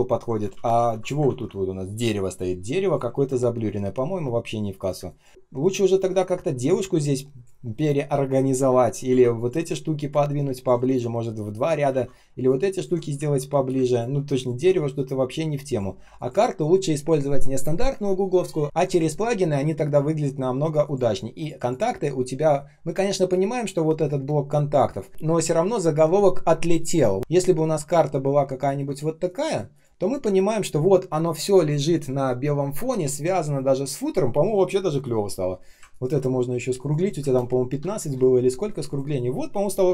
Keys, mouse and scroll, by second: 0.4 ctrl+z, 3.1 ctrl+z, 4.9 space, 9.0 ctrl+z, 11.8 ctrl+z, 13.2 ctrl+z, 13.6 space, 14.4 ctrl+click, 14.7 space, 15.2 space, 16.1 ctrl+click, 35.8 ctrl+click, 37.9 Return, 39.8 ctrl+z.